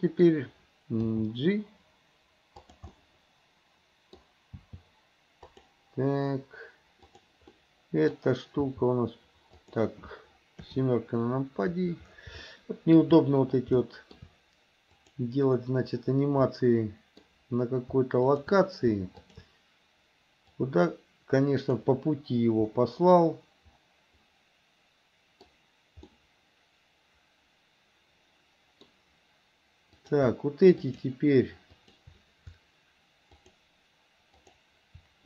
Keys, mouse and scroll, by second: 1.2 g, 3.0-4.3 middle drag, 4.6 g, 7.0 click, 7.6 middle click, 8.7 g, 10.7 KP_7, 12.5 shift+middle click, 13.9 shift+middle click, 15.0 click, 16.5 middle click, 19.2 shift+click, 20.7-21.9 drag, 22.7-25.5 middle drag, 26.2-28.9 middle drag, 30.0 click, 30.8 shift+click, 31.8 shift+click, 33.4 shift+click, 34.4 shift+click.